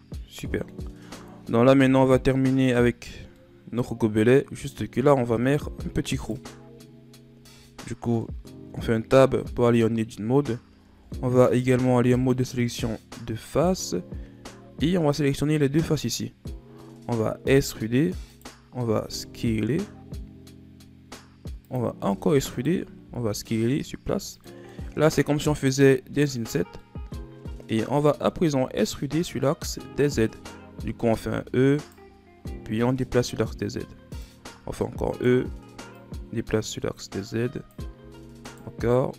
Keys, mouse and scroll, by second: 1.7 KP_7, 3.3-5.0 middle drag, 5.0 scroll down 2, 5.3 middle click, 5.6-6.2 scroll up 1, 6.2 right click, 6.8-7.3 scroll up 3, 7.3 Tab, 8.2-10.9 middle drag, 10.9 ctrl+Tab, 13.5-15.1 right drag, 16.5-17.5 scroll up 2, 17.5 e, 22.0 e, 24.6 scroll down 1, 24.6-25.9 middle drag, 25.9-26.3 scroll down 3, 26.3-26.7 scroll up 3, 26.7-28.2 middle drag, 28.2-28.8 scroll up 6, 28.9-29.2 scroll up 2, 31.1 e, 32.7-34.6 drag, 34.6 e, 35.8-37.9 drag, 37.9 e.